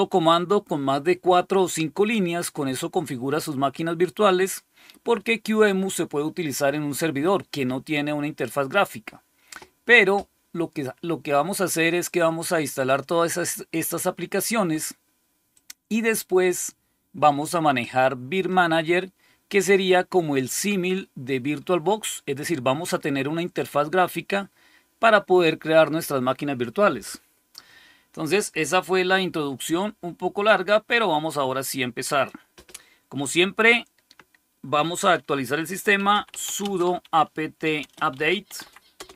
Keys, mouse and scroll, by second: 15.4 click, 30.3 click, 32.0 click, 35.6-39.1 typing.